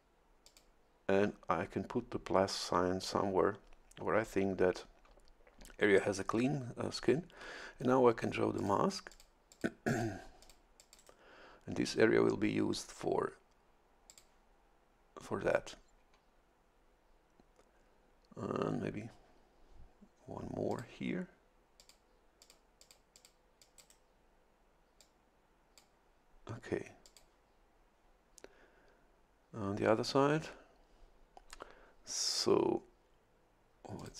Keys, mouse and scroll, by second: 0.4 shift+click, 8.6 click, 9.1 click, 9.5 click, 9.9 click, 10.4 click, 10.8 click, 11.0 right click, 14.1 click, 20.7 click, 21.8 click, 22.4 click, 22.8 click, 23.1 click, 23.6 click, 25.0-26.3 drag, 27.0 click, 34.0 click.